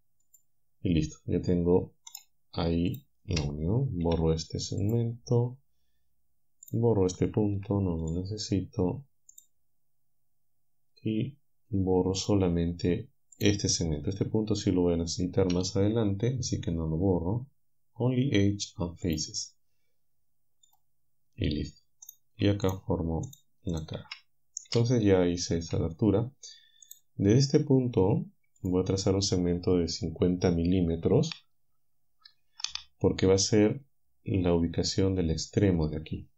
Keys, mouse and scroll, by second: 2.1 click, 2.9 shift+right click, 4.1 Delete, 4.9 click, 7.6 Delete, 8.1 click, 12.2 click, 13.4 click, 15.5 Delete, 19.1-21.0 drag, 22.1 click, 22.7 shift+click, 23.3 shift+click, 23.8 shift+click, 24.7 f, 25.7 a, 26.9 click.